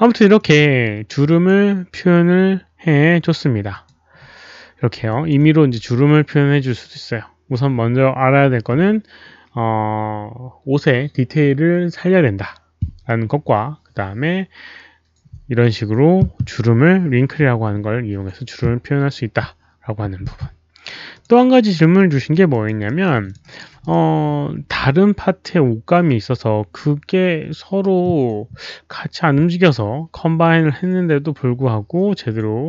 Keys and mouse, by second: 0.3 click, 1.2 click, 3.7 click, 5.1 alt+click, 11.2 alt+click, 14.4 alt+click, 21.1 click, 21.9 click, 22.4 alt+click, 22.8 alt+middle click, 23.2 alt+click, 23.3 alt+right click, 23.7 click.